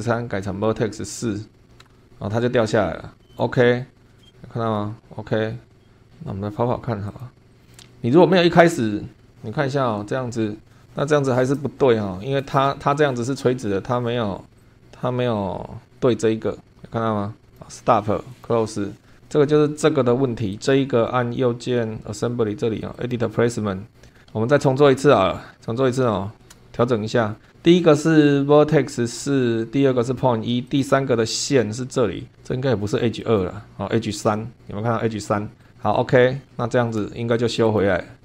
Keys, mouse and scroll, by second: 0.9 F12, 1.8 BackSpace, 1.9 4, 3.3 click, 4.1 scroll up 1, 4.2 shift+middle click, 7.1 click, 7.5 click, 8.2 click, 14.6 click, 17.5 click, 18.3 click, 20.5 right click, 22.9 click, 24.2 scroll up 1, 25.1 middle click, 25.5 scroll up 1, 26.1 shift+middle click, 26.5-26.8 shift+scroll up 1, 30.7 click, 33.2 click, 35.6 click, 35.8-36.1 scroll down 1, 36.6 shift+click, 36.7-37.1 shift+scroll down 1, 37.6 click.